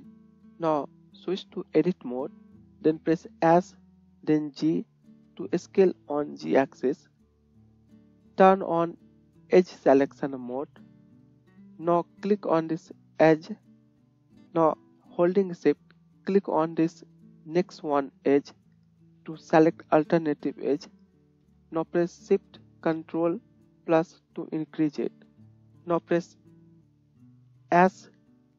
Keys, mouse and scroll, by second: 3.6 s, 7.6-10.6 middle drag, 11.2 click, 13.8 click, 18.4 shift+click, 19.3-21.3 middle drag, 21.3-25.1 shift+drag, 23.9 ctrl+shift+KP_Add, 24.2 ctrl+shift+KP_Add, 24.8 ctrl+shift+KP_Add, 25.1 ctrl+shift+KP_Add, 27.7 s.